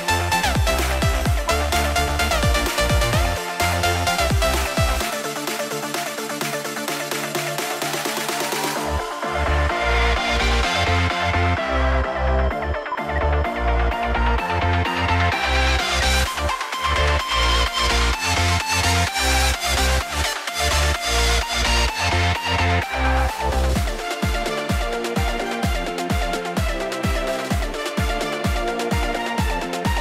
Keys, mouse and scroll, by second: 7.5 right click, 8.7 double click, 11.0 right click, 13.0 shift+F2, 13.6-14.3 scroll down 1, 15.8 F2, 25.9 right click.